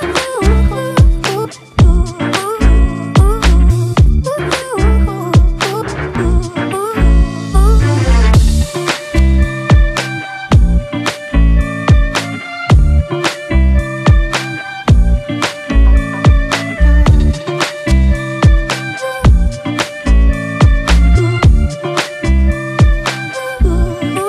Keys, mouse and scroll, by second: 1.4 ctrl+t, 2.7 alt+shift+click, 6.0 Return, 6.2 ctrl+t, 7.9 alt+shift+click, 10.2 shift+Return, 10.9 Left, 11.1 Left, 11.9 Up, 12.2 Up, 13.0 Left, 13.3 Down, 13.5 Down.